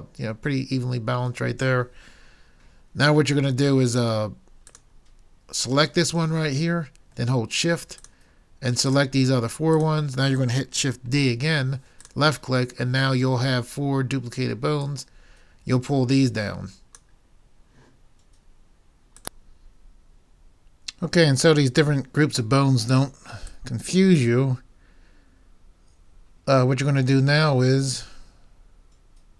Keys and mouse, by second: 8.0-11.2 drag, 11.2 shift+d, 11.9 click, 11.9 right click, 13.9 click, 13.9 right click.